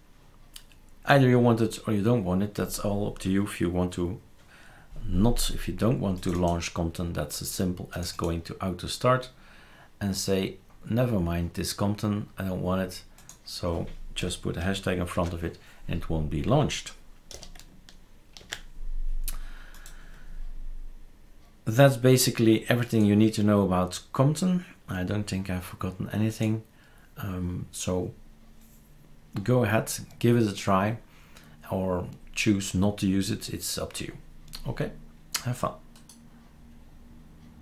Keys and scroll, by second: 14.2 Left, 15.1 typing, 17.3 BackSpace, 18.4 ctrl+s.